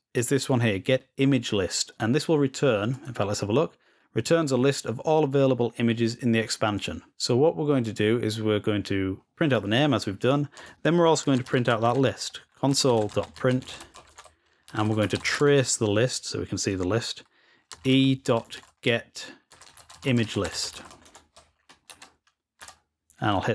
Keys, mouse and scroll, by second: 0.2 click, 2.8 click, 11.0-12.0 scroll down 2, 12.0-12.8 scroll down 1, 14.0-14.8 scroll down 2, 14.8 scroll down 1.